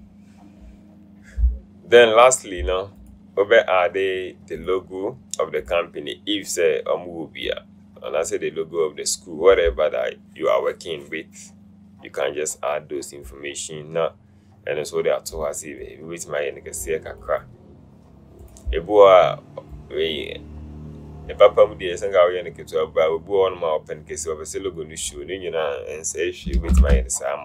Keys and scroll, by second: 26.7 Left, 26.9 Left.